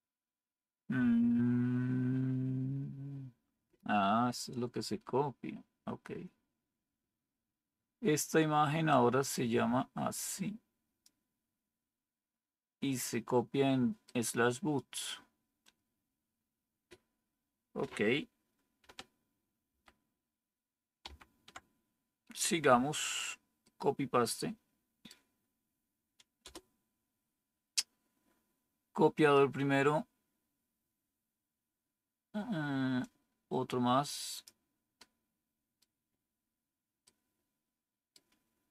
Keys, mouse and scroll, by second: 19.6 ctrl++, 21.0 ctrl++, 26.3 Return.